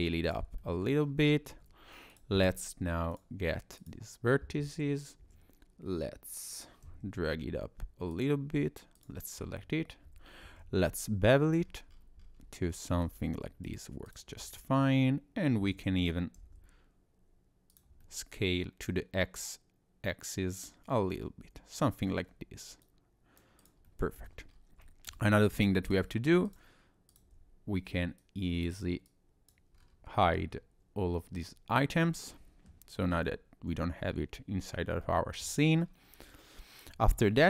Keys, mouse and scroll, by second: 0.6 middle click, 1.0-1.5 scroll down 2, 1.5 Tab, 2.1 click, 3.1 click, 3.8 click, 5.2 e, 9.0 click, 10.4 ctrl+b, 13.3 Tab, 13.7 right click, 14.4 middle click, 15.6 s, 18.0 middle click, 22.2-22.8 scroll down 1, 22.8 click, 23.6 click, 23.9 middle click, 24.5 scroll up 2, 24.8 shift+middle click, 25.3 scroll up 1, 25.8 click, 26.5 shift+click, 27.1 click, 28.2 click, 29.1 click, 29.8 scroll down 2, 29.9 scroll up 1, 30.1-30.6 scroll down 1, 32.0 middle click, 33.1-33.5 scroll up 2, 35.0 shift+middle click, 35.6 scroll down 2, 35.8-36.3 scroll up 2, 36.3-36.6 scroll down 1, 37.0 scroll up 2.